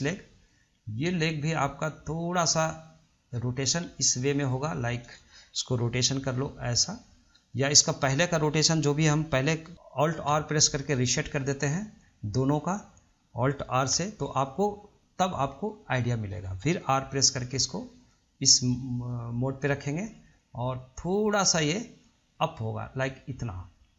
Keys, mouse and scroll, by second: 3.5 click, 6.3 r, 10.5 alt+r, 11.8 drag, 12.7 click, 14.1 alt+r, 15.9 click, 17.2 r, 22.5 click.